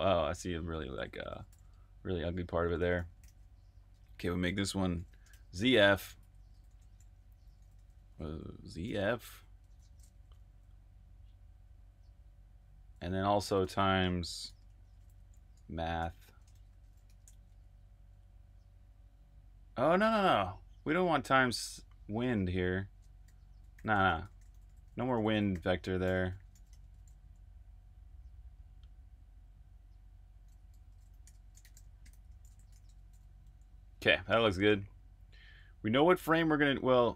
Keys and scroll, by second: 0.1-10.4 typing, 12.0-13.4 typing, 16.7 typing, 18.5 typing, 23.5-24.4 typing, 26.3-27.1 typing, 30.6-34.1 typing, 35.5 k.